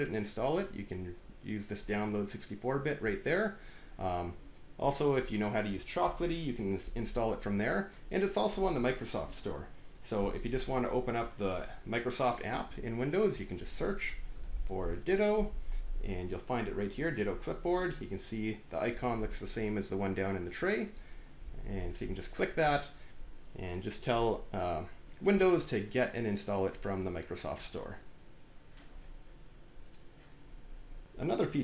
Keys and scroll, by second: 13.8-15.0 typing.